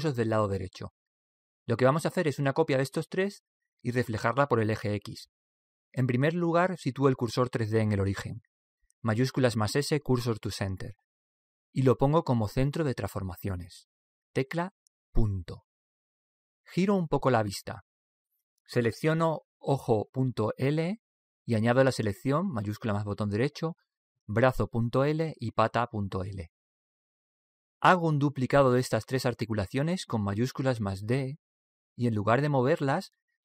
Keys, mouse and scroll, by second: 9.2 shift+s, 15.3 ., 17.4-19.3 middle drag, 20.3 right click, 24.7-28.2 right drag, 31.3 shift+d.